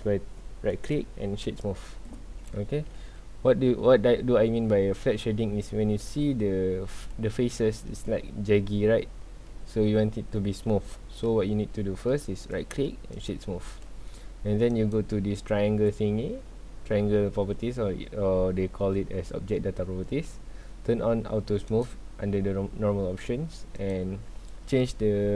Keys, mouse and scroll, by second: 0.7 right click, 2.9 ctrl+z, 3.3-4.6 scroll up 2, 4.6-5.4 scroll down 2, 5.4 scroll up 2, 5.7 scroll down 2, 6.0-6.4 middle drag, 6.4-7.3 scroll up 2, 7.3 scroll up 1, 7.5-9.4 middle drag, 9.4 scroll down 2, 9.7-10.3 middle drag, 10.3-11.0 scroll up 2, 11.0 scroll down 2, 11.2-11.7 middle drag, 11.7 scroll up 1, 12.5-14.7 right drag, 14.7 click, 21.7 click, 23.7-25.3 drag.